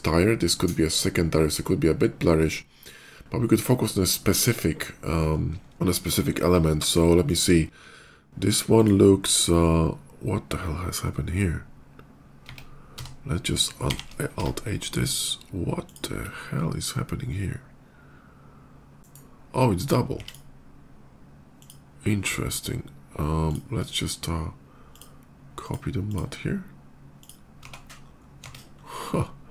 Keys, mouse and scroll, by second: 3.7 middle click, 4.1 middle click, 4.5 click, 5.0 click, 5.5 click, 6.7 shift+middle click, 8.6 shift+click, 11.2 click, 12.3 Tab, 12.8 a, 12.9 Tab, 13.5 alt+h, 14.2 Tab, 14.7 click, 15.0 alt+h, 15.7 click, 16.1 /, 19.0 g, 20.0 x, 20.0 click, 21.5 click, 24.6 shift+click, 25.4 shift+click, 25.8 shift+click, 27.0 click, 27.5 Tab, 27.9 middle click, 28.0 middle click, 28.1 middle click, 28.2 scroll up 1, 28.6 middle click, 28.8 middle click.